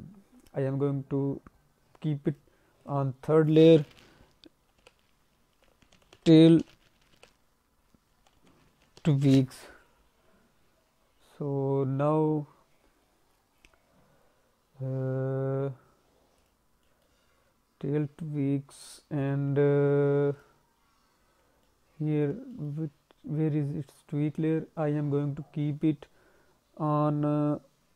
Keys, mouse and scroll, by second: 0.6-1.1 scroll down 1, 1.1-2.1 scroll down 2, 2.3 click, 2.7 click, 16.8 middle click, 17.2-17.9 scroll up 2, 20.3 click, 21.6 alt+middle click, 22.5 middle click, 22.7-23.1 scroll up 2.